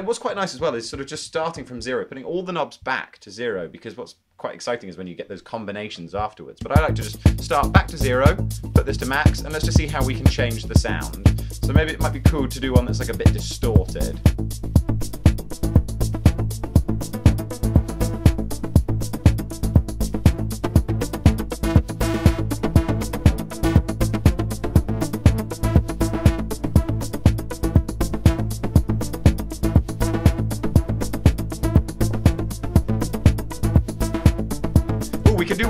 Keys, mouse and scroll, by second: 0.0-1.4 typing, 1.6 Return, 2.6 typing, 6.7 space, 33.6 double click, 35.2 double click.